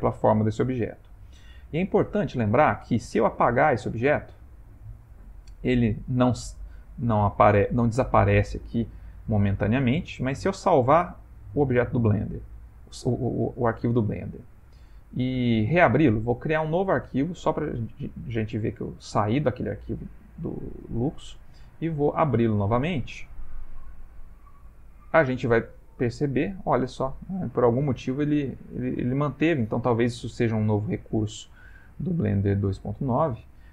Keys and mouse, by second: 1.4 ctrl+middle click, 2.6 middle click, 3.0 middle click, 3.5 x, 5.2 middle click, 5.4 ctrl+middle click, 6.7 click, 10.2 ctrl+s, 12.6 click.